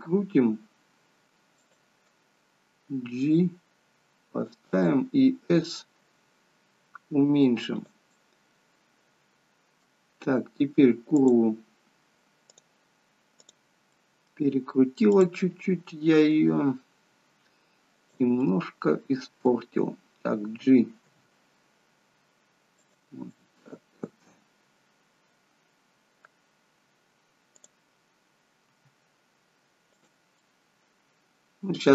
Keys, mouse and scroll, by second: 3.0 g, 6.2 s, 8.3 middle click, 11.3 click, 12.6 click, 14.1 middle click, 15.3 click, 16.4 r, 18.5 middle click, 21.2 g, 23.4 middle click, 27.6 click, 28.9 r, 30.6 middle click.